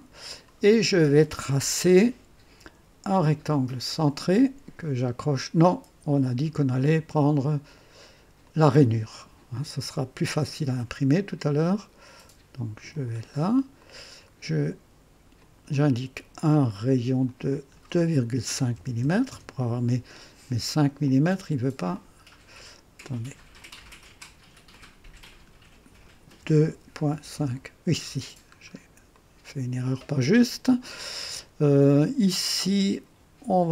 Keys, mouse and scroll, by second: 4.0 click, 8.4 click, 11.3 click, 12.9 click, 13.8 right click, 15.4 click, 17.2 click, 18.5-19.3 typing, 21.0 click, 21.9 click, 23.6 click, 24.7 click, 26.4-27.3 typing, 28.7 scroll up 1, 29.1 right click, 29.5 typing, 32.6 click.